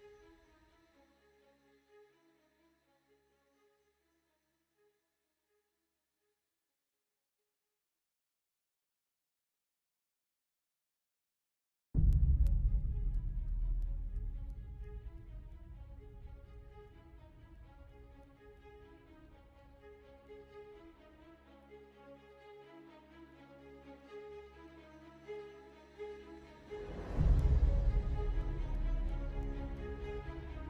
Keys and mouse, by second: 0.4 middle click, 1.6-2.7 middle drag, 3.1 middle click, 3.7 middle click, 5.8 ctrl+alt+click, 7.2-8.3 ctrl+alt+drag, 9.2 ctrl+alt+click, 12.0 click, 13.5 ctrl+click, 15.5 ctrl+click, 16.9 ctrl+KP_Add, 18.2 ctrl+KP_Subtract, 19.6 ctrl+KP_1, 21.3 s, 24.4 middle click, 28.8 KP_1, 29.9 KP_3.